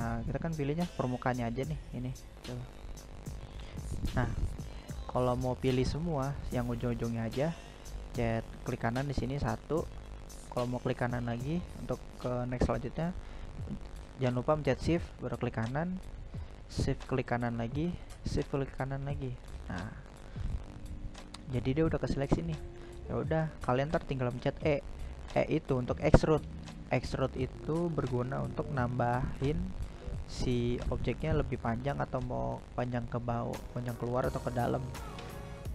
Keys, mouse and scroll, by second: 0.6-2.0 right drag, 5.2 right click, 5.5-8.9 right drag, 11.5 shift+right click, 13.4 shift+right click, 14.7 shift+right click, 15.9-17.4 scroll down 1, 17.4-20.7 middle drag, 20.7-21.6 scroll up 1, 21.6-22.4 scroll down 1, 22.4-25.6 shift+middle drag, 31.4 e, 34.4-35.7 middle drag.